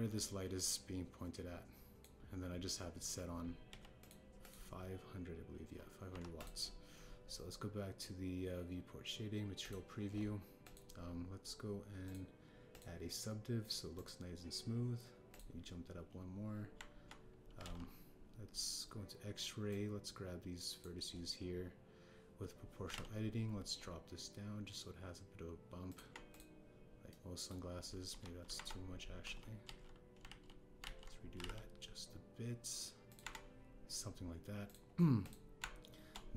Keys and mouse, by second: 0.1-0.6 drag, 1.5-2.9 drag, 4.6 x, 5.4 click, 7.0 KP_1, 11.6 click, 13.0 click, 13.7-15.1 drag, 16.2 click, 17.7 Tab, 18.5 alt+z, 20.6 click, 23.8 g, 23.9 z, 27.0 Tab, 28.0-28.4 drag, 29.0 KP_1, 29.5 Tab, 30.2 ctrl+z, 30.7 ctrl+z, 31.3 ctrl+z, 31.8 ctrl+z, 32.3 g, 32.4 z, 34.1 Tab.